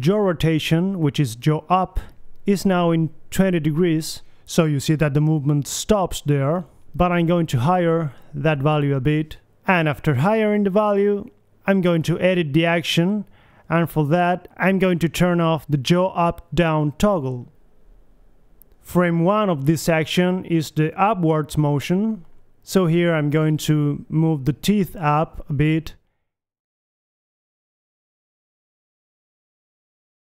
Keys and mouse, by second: 2.0 r, 4.2 click, 4.4 r, 5.9 click, 6.4 middle click, 7.3 KP_3, 8.3 ctrl+c, 8.3 ctrl+v, 9.6 r, 10.8 click, 11.2 KP_3, 11.7 click, 12.7 middle click, 13.7 click, 14.7 KP_3, 14.8 a, 15.2 alt+r, 18.8-19.9 middle drag, 20.5 middle click, 21.4 Left, 21.9 Right, 22.3 Right, 24.7 middle click, 25.8-29.7 typing, 27.6 click, 28.6 click, 28.9 ctrl+z.